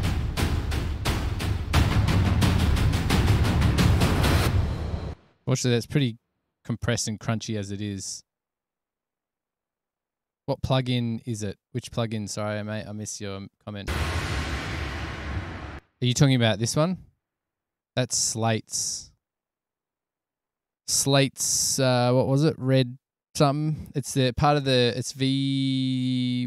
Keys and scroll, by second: 5.3 space, 14.0 space, 16.0 space.